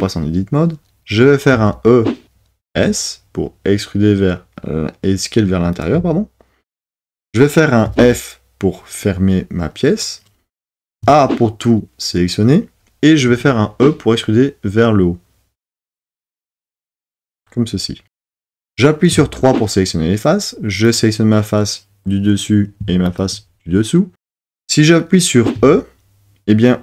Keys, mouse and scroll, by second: 1.5 e, 7.8 f, 10.9 a, 13.3 e, 19.1 3, 20.9-22.2 drag, 25.6 e.